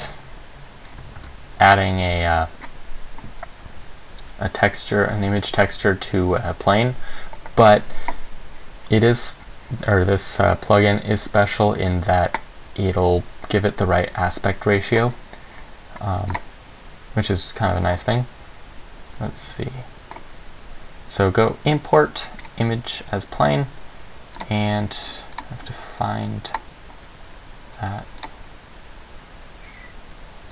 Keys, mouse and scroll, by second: 1.3 shift+a, 16.5 click.